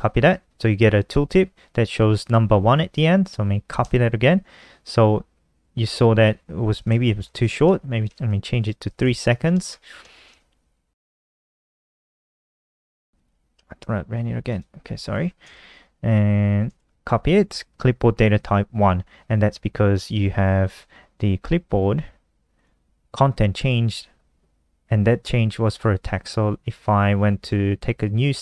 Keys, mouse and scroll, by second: 3.9-4.7 typing, 7.1 click, 7.7-8.8 typing, 9.0 click, 9.6 shift+Home, 9.8 shift+Home, 9.8 ctrl+shift+Right, 13.1 click, 13.3 ctrl+s, 13.5 F5, 14.4 click, 14.8-15.6 typing, 15.8 ctrl+shift+Right, 16.7 ctrl+c, 22.5 click, 27.4 click.